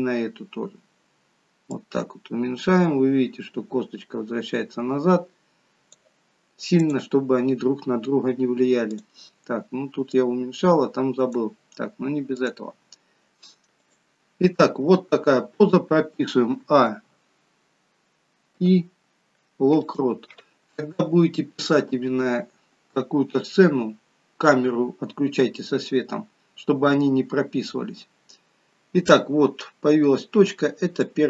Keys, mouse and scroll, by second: 0.3-1.7 scroll down 6, 1.7 click, 6.7 click, 8.9 click, 12.5 click, 13.3 g, 15.0-15.8 scroll down 1, 16.6 a, 18.6 i, 30.9 click.